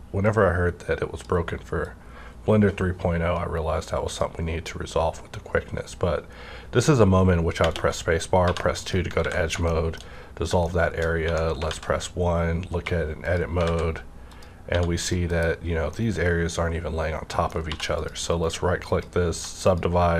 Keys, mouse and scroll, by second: 4.4 scroll down 1, 4.9 scroll up 1, 7.7 scroll up 1, 8.4 2, 8.8 click, 9.3 ctrl+x, 9.4 scroll down 1, 9.7 shift+middle click, 10.0 shift+scroll up 1, 10.6 shift+middle click, 11.1 shift+scroll up 1, 11.2 1, 11.7 alt+z, 12.7 2, 13.2 click, 13.6 alt+z, 14.3 click, 14.7 1, 15.0 click, 15.3 KP_Decimal, 15.6 scroll down 1, 15.9-17.9 middle drag, 17.7 2, 17.9 click, 18.3 right click, 18.9 click, 19.3 1, 19.6 click.